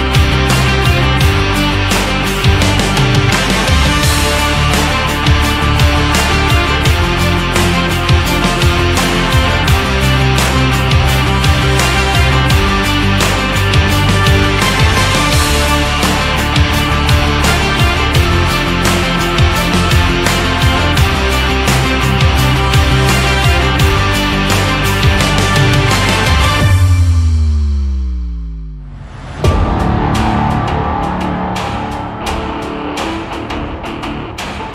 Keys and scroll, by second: 18.6 ctrl+z, 22.6 ctrl+z.